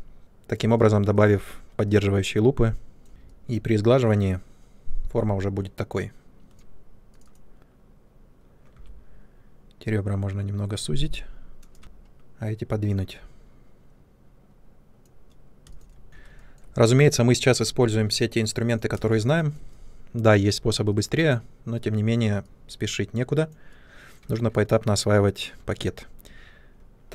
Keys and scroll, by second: 3.1 shift+Tab, 8.7 r, 11.8 w, 15.6 space, 17.6 ctrl+space.